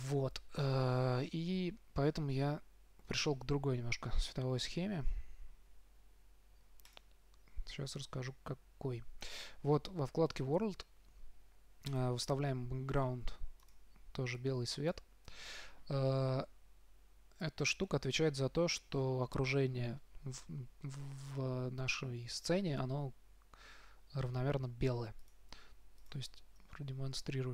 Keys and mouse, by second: 8.8 click, 12.2-15.7 drag, 25.5-27.2 drag, 27.4 click.